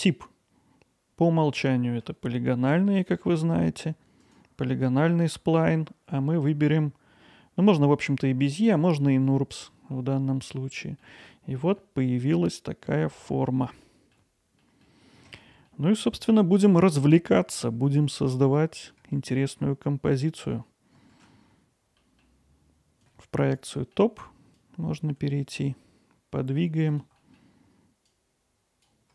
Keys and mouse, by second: 3.4 alt+middle click, 4.4-6.8 right drag, 6.9 right click, 7.3-9.6 right drag, 10.1 alt+middle click, 11.8-12.9 alt+middle drag, 13.9 alt+middle click, 14.6 middle click, 16.3-18.9 middle drag, 19.1-19.6 alt+middle drag, 21.1 shift+d, 21.4 middle click, 23.8 middle click, 24.8 click, 26.9 click, 27.2 middle click, 27.8 click, 28.2 shift+click, 28.6 middle click, 29.0 middle click.